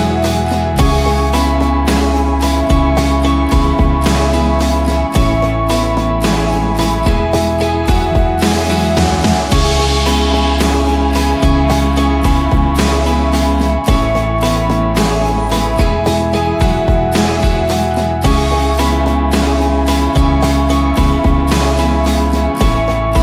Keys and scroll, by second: 1.0-10.2 typing, 10.9 Return, 17.9-18.6 typing, 20.3 ctrl+d, 21.0 Down, 21.7 -, 22.0 Return.